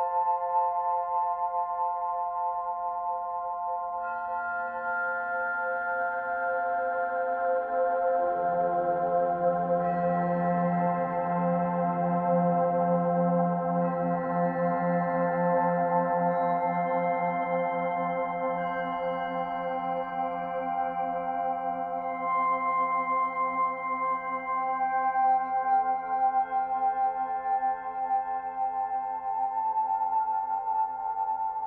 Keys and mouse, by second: 5.3 click, 6.3 s, 7.6 click, 9.1 Delete, 10.0 click, 11.0 Tab, 11.9-15.4 alt+drag, 15.8-17.3 alt+drag, 16.9 Tab, 17.7-20.4 alt+drag, 21.1 alt+click, 22.8 ctrl+click, 23.0 ctrl+z, 23.2 ctrl+z, 23.6 ctrl+z, 23.8 ctrl+z, 24.2 ctrl+z, 24.5 ctrl+z, 25.1 ctrl+z, 31.1-31.6 alt+drag.